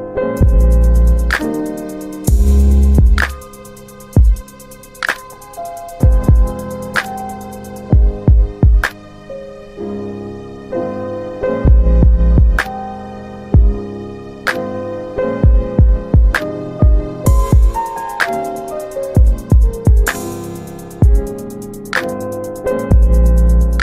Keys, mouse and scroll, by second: 0.0 click, 4.9 alt+w, 5.2 alt+w, 5.8 alt+middle click, 6.8 ctrl+click, 9.3 middle click, 10.0 scroll up 1, 12.0 w, 13.7 2, 15.2 click, 15.5 double click, 17.0 click, 19.8 double middle click, 19.8-20.4 scroll down 2, 20.4-21.0 scroll down 1, 21.2 middle click, 21.4-21.7 scroll down 2, 22.2 alt+middle click, 23.0-23.8 scroll up 1.